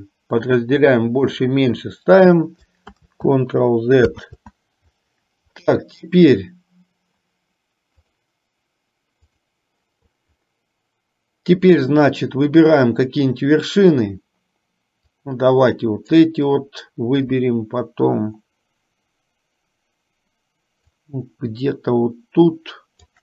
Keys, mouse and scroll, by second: 0.9 shift+middle click, 2.9 ctrl+z, 4.4 ctrl+z, 9.3 click, 15.2-16.3 drag, 21.2-23.2 shift+drag.